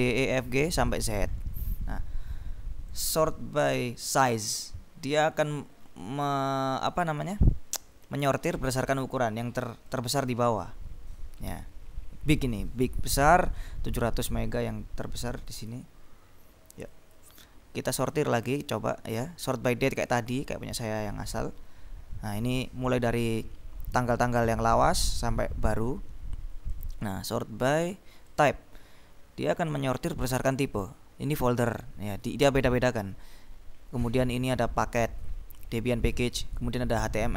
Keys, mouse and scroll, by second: 0.6-2.0 scroll up 2, 3.1 click, 4.2 click, 5.5-6.8 scroll down 4, 6.8-7.8 scroll up 2, 10.0 click, 10.5-11.6 scroll down 2, 11.6 scroll up 2, 11.8-13.5 drag, 12.3 scroll down 2, 13.5 scroll down 2, 15.3 click, 15.4 scroll up 2, 15.5 click, 17.0 click, 18.1 click, 20.0 click, 20.6-22.0 scroll up 3, 25.1-26.4 scroll down 2, 26.8 click, 28.4 click, 29.0-30.3 scroll up 2, 31.1-32.9 scroll down 2, 32.9-33.4 scroll up 2, 33.6-34.0 scroll down 2, 34.0-35.3 scroll up 2, 36.3-36.8 scroll down 2.